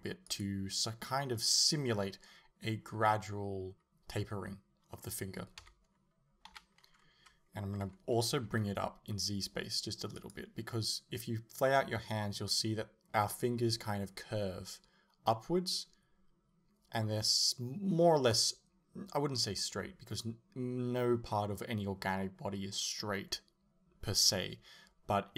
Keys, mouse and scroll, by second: 0.4 click, 5.6 KP_1, 6.5 KP_3, 7.9 g, 10.3 click.